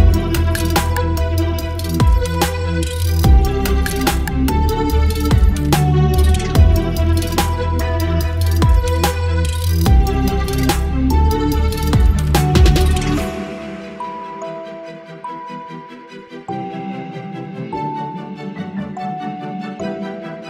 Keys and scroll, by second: 4.0 Delete, 4.3 ctrl+d, 4.4 ctrl+v, 6.3 space.